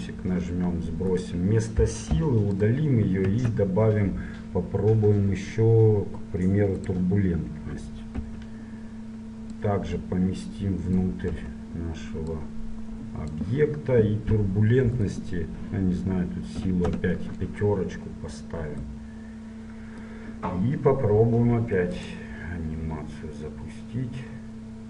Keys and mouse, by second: 0.9 middle click, 1.3-3.3 right drag, 2.2 Delete, 3.5 shift+a, 8.3 KP_7, 9.7-11.5 drag, 11.5 KP_1, 12.4-14.4 drag, 15.2-16.9 drag, 19.0 middle click, 22.0-23.8 drag.